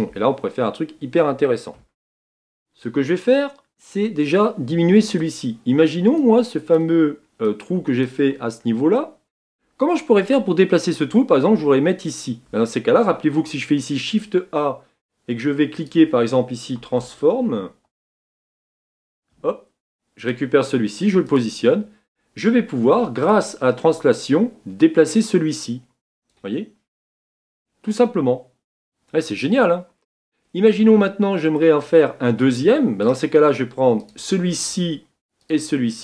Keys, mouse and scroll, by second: 3.1-9.2 drag, 9.2-21.3 middle drag, 27.7-36.0 drag.